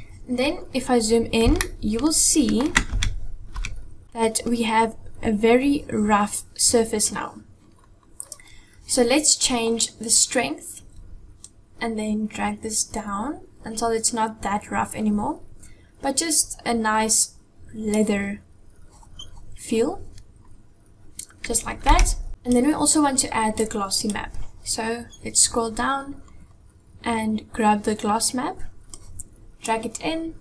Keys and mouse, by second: 1.4 shift+middle click, 2.8 Tab, 3.5 Tab, 4.0 a, 11.4-17.7 drag, 21.8 Tab, 22.3 click, 30.3 click.